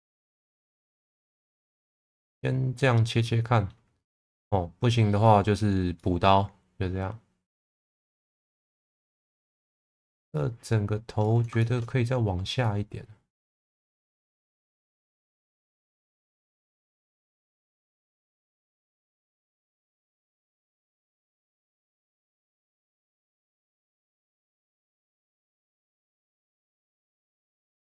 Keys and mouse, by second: 0.7 click, 1.6 click, 3.2 middle click, 4.3-5.3 middle drag, 6.0-7.5 middle drag, 8.1 shift+middle click, 9.3 shift+middle click, 10.5 click, 11.6 shift+middle click, 12.6 click, 15.1 ctrl+z, 17.0 click, 17.8-19.2 drag, 20.8 click, 22.1 g, 22.4 z, 24.5 click, 25.7 click, 27.2 click.